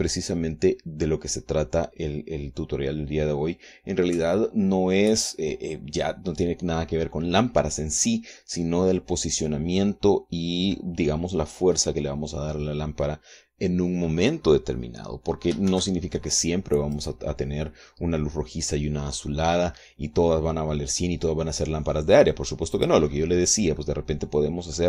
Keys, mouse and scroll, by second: 16.4 shift+z, 17.6 right click, 23.4 click, 23.8 scroll down 2, 24.5 click.